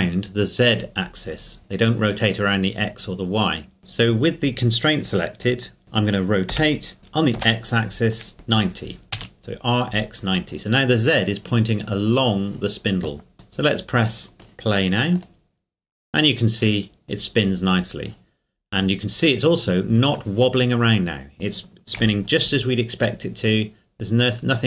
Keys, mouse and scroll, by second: 6.5 r, 7.4 x, 8.3 KP_9, 8.5 KP_0, 9.1 KP_Enter, 13.6 KP_Enter, 13.8 middle click, 15.3-17.1 drag, 18.3 scroll up 1, 21.1 scroll down 1, 22.0 KP_1, 22.6 scroll down 1, 23.2 scroll up 1.